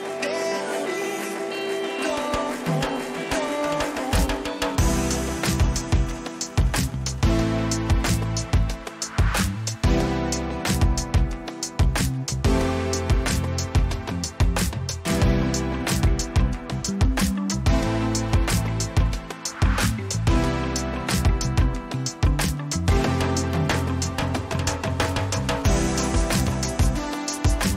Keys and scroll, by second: 21.6 ctrl+j, 22.0 ctrl+t, 27.4 Return.